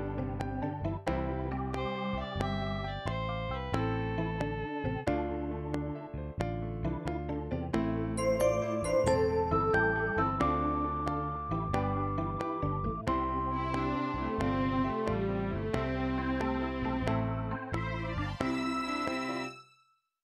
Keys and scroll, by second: 19.4 space.